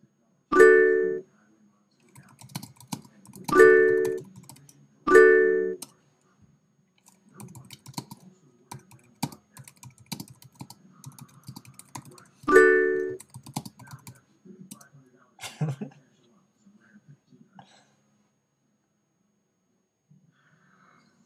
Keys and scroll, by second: 5.8 Return, 14.7 Return.